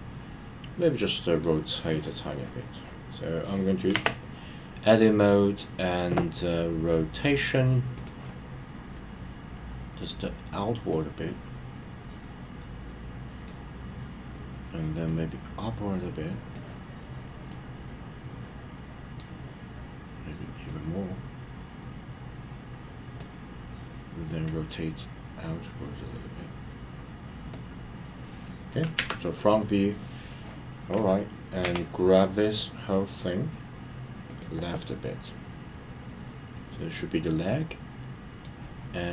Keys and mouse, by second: 8.4 click, 10.9 click, 11.1 click, 15.0 click, 15.3 click, 17.5-19.2 middle drag, 20.7 click, 20.8 click, 24.6 click, 34.3 click, 34.8-38.4 middle drag.